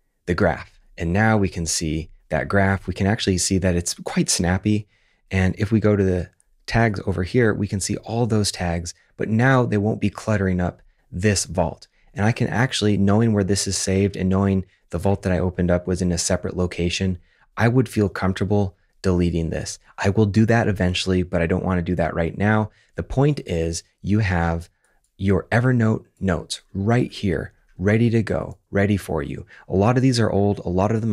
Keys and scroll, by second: 15.8 super+`, 17.1 super+`, 22.9 super+Tab, 23.5 super+Tab, 23.9 super+`.